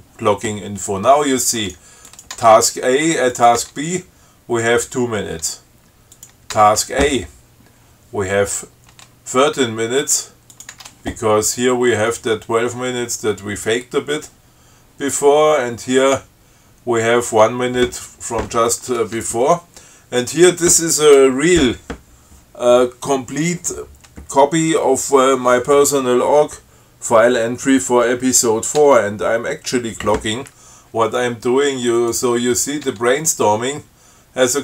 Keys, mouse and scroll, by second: 2.0 click, 2.4 click, 2.6 Tab, 3.6 click, 3.9 Tab, 6.4 click, 6.8 Tab, 10.8 click, 11.0 Tab, 20.5 click, 29.1 Tab, 32.2 click, 33.1 Tab.